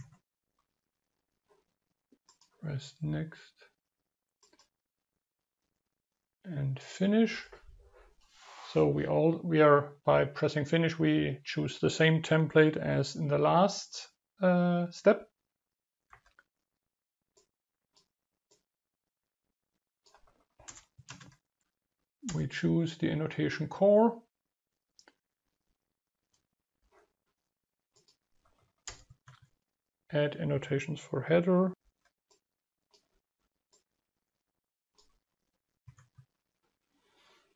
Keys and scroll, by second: 18.8 ctrl+space, 26.9 ctrl+v, 33.3 ctrl+v.